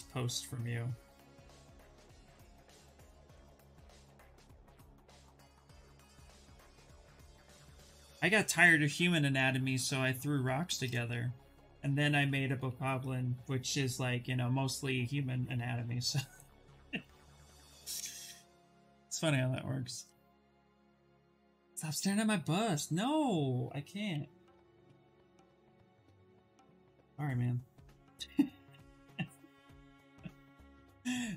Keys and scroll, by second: 22.2 s, 23.7 b, 24.1 d.